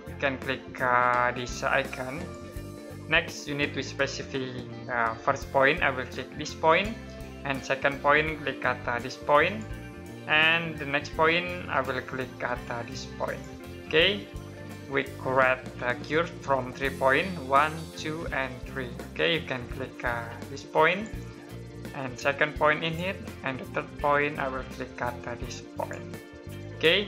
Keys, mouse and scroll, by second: 1.9 click, 2.8 middle click, 6.4 click, 9.2 click, 13.0 click, 19.2 middle click, 20.6 click, 26.8 scroll down 1.